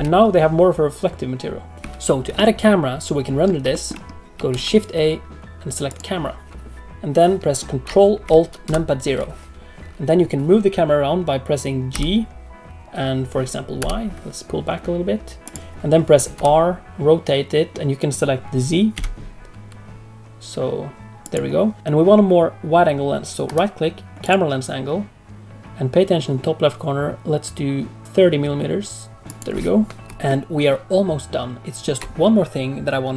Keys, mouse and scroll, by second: 1.8 space, 1.8 shift+a, 2.3 middle click, 3.7 shift+middle click, 4.5 shift+a, 8.6 ctrl+alt+KP_0, 11.9 g, 16.3 r, 23.4 right click, 30.2 ctrl+middle click.